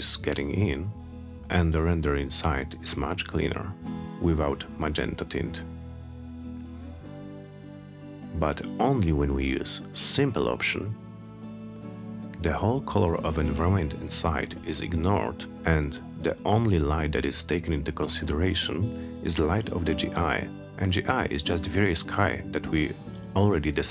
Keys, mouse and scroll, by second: 5.8 click, 10.6 click.